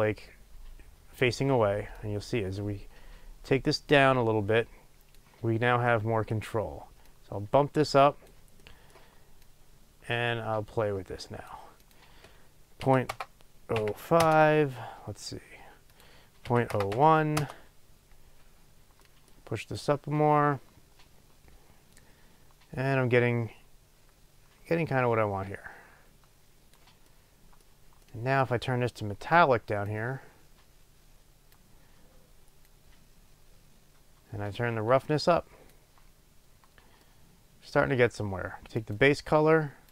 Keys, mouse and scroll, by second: 14.2 Return, 17.5 Return.